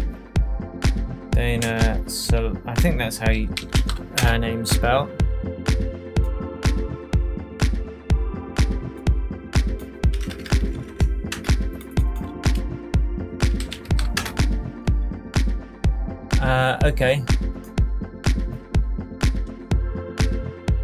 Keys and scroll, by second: 1.6-4.3 typing, 10.1 BackSpace, 11.3 Return, 13.1-14.4 typing.